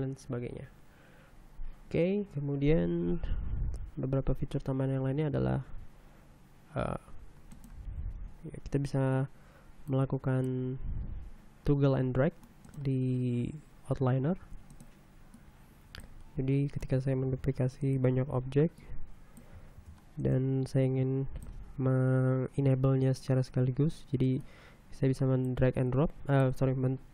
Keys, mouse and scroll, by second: 6.4 Tab, 15.1 shift+d, 17.9 shift+d, 18.4 shift+right click, 19.4 click, 20.4 shift+d, 20.9 shift+right click, 21.5 shift+click.